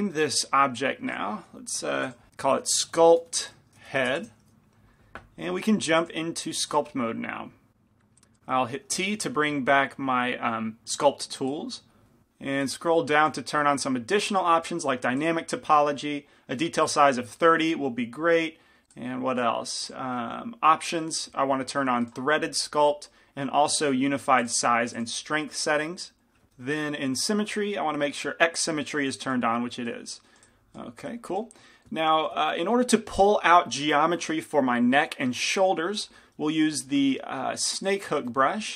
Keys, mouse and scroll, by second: 1.2-4.3 drag, 6.9-38.4 drag, 9.3 t, 38.4-38.7 middle drag.